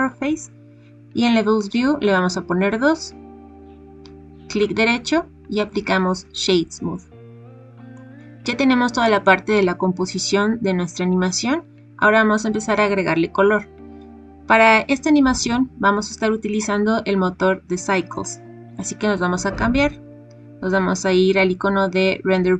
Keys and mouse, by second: 2.1 click, 4.5 click, 7.9 click.